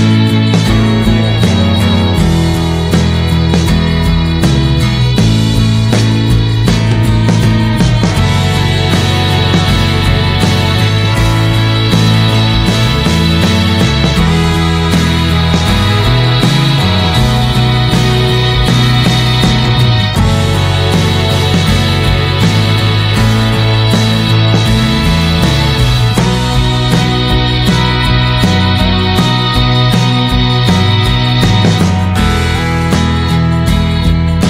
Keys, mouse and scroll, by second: 0.3-2.8 middle drag, 2.9 click, 3.2 scroll up 2, 3.5-4.8 middle drag, 4.8 click, 5.0 scroll down 2, 5.2-6.7 middle drag, 6.7-7.8 drag, 7.8-9.6 middle drag, 9.6-14.6 drag, 14.6 n, 15.1-17.2 middle drag, 17.2-18.4 drag, 18.6 middle click, 18.7 scroll up 1, 18.9 click, 19.2-20.3 shift+middle drag, 20.3 shift+d, 22.9-27.2 drag, 30.0 click.